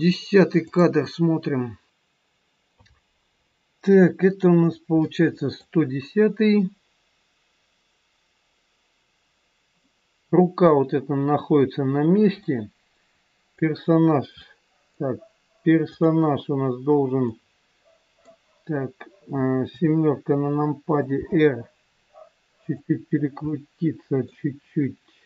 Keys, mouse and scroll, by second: 0.7 click, 4.6 scroll up 2, 5.0 middle click, 12.5 middle click, 15.8 click, 17.2 middle click, 19.6 KP_7, 21.2 r, 23.4 middle click.